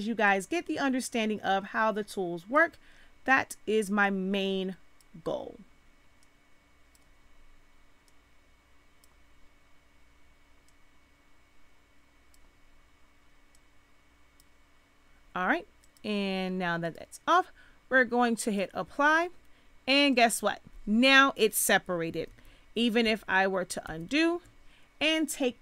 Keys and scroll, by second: 22.2 ctrl+z.